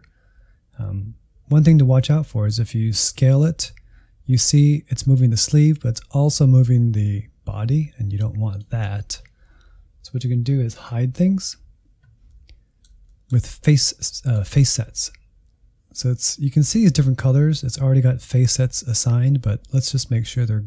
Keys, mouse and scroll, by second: 3.4-8.8 drag, 8.8 ctrl+z, 12.2-17.0 middle drag, 20.2-20.6 drag.